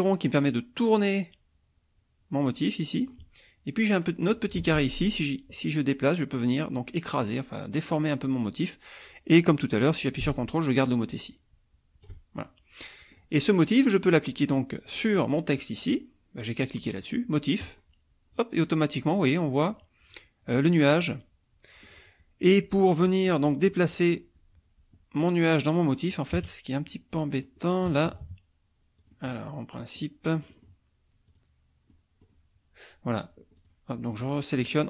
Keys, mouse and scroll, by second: 0.0-3.2 drag, 5.3-12.2 drag, 12.4 ctrl+middle click, 13.8 middle click, 14.9 click, 17.6 click, 21.0-22.0 middle drag, 22.8 middle click, 26.4 KP_Subtract, 27.2 middle click, 27.9 KP_Subtract, 29.0 click, 29.8 middle click, 30.2 middle click, 31.3 click, 31.9 middle click, 33.6 click, 34.1 click.